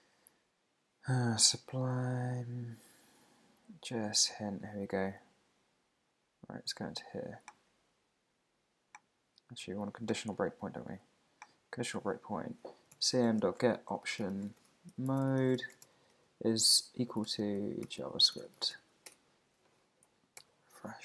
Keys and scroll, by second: 13.8 shift+o, 14.5 shift+9, 15.6 shift+0, 19.1 Return, 20.1 super+`, 20.4 super+r.